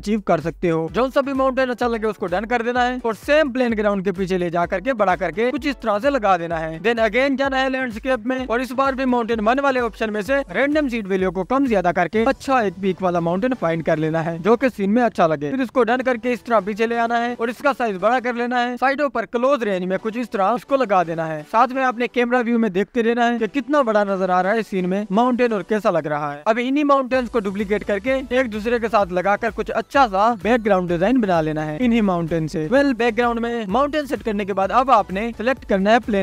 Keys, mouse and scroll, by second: 3.7-4.2 scroll down 2, 4.2 click, 4.6 s, 5.6 click, 6.3 s, 7.5 shift+a, 8.8 shift+a, 9.3-16.0 drag, 16.7 click, 16.8 shift+z, 17.0-17.7 scroll down 5, 17.7 s, 19.0 scroll down 2, 19.4-20.2 drag, 21.0-22.2 drag, 23.1 s, 25.4-26.8 drag, 27.5-28.7 scroll down 3, 28.7 click, 29.2 scroll up 2, 29.4-30.2 scroll down 1, 30.2 ctrl+s, 30.2-31.2 scroll down 1, 33.8 click, 34.2 scroll up 4, 34.5 scroll down 1, 35.6-36.2 scroll down 2.